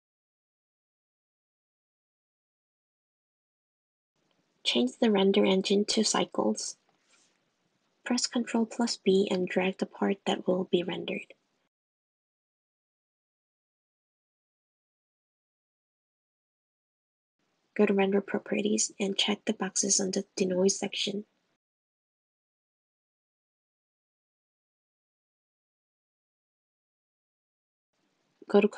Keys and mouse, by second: 2.7 middle click, 3.5 click, 5.2 click, 6.2 click, 8.4 super+b, 10.2 s, 18.0 click, 18.9 drag, 19.4 click, 22.9 click, 24.7 click, 26.3 click, 26.8 click, 27.7 click.